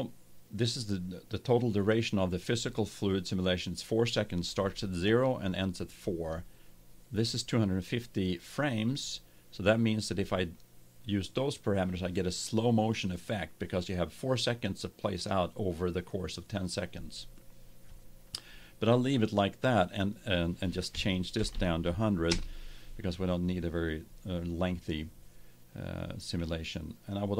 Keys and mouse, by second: 19.9-21.9 drag, 21.4 0.